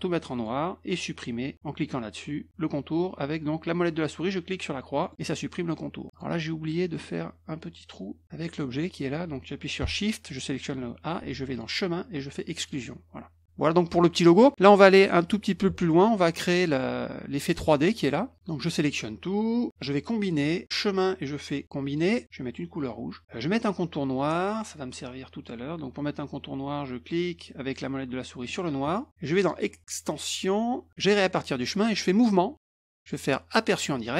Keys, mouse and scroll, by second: 0.3 click, 5.0 middle click, 6.1 click, 6.8 middle click, 7.0 middle click, 10.3 shift+click, 11.5 click, 12.6 click, 13.6 middle click, 18.1 middle click, 18.6-19.7 drag, 20.6 click, 21.9 click, 28.4 middle click, 29.4 click, 32.1 click, 32.5 click, 33.9 click.